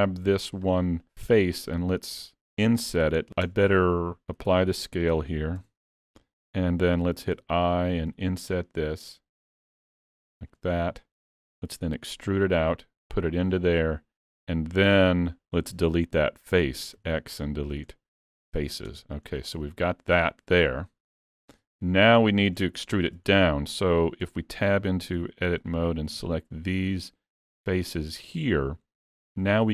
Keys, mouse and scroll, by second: 0.3 3, 0.7 click, 1.0 middle click, 2.8 middle click, 3.2 shift+middle click, 3.8 Tab, 4.5 ctrl+a, 5.7 Tab, 7.3 i, 10.8 middle click, 11.4-12.2 scroll up 1, 12.2 e, 14.3 middle click, 18.9 Tab, 19.3-20.0 scroll down 3, 19.6 middle click, 20.9-21.2 scroll down 2, 21.2 shift+middle click, 22.1 middle click, 22.8 shift+middle click, 23.3-23.6 scroll up 1, 24.3 Tab, 25.1 3, 25.7 click, 26.3 shift+click, 28.0 middle click, 28.7-29.7 scroll down 4, 29.1 middle click.